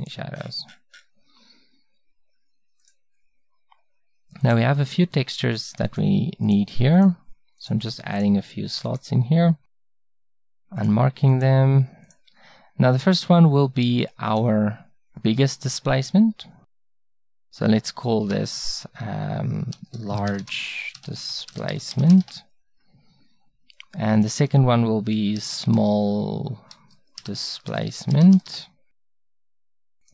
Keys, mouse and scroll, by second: 3.7-14.4 drag, 16.8-18.7 drag, 19.7-24.2 middle drag, 25.9 l, 26.2-30.1 middle drag.